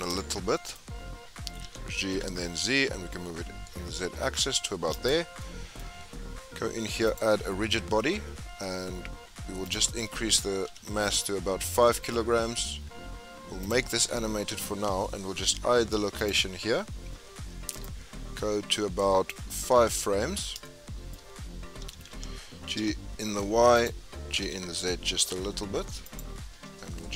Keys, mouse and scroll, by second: 0.1 shift+middle click, 0.7-1.6 scroll up 4, 1.6 g, 5.4-7.0 shift+middle drag, 7.0-12.4 drag, 12.4-12.8 scroll up 2, 13.6 click, 17.0-17.8 scroll up 1, 17.8-19.8 drag, 19.8-20.2 scroll down 3, 20.6-21.8 shift+middle drag, 21.8 g, 24.4 g.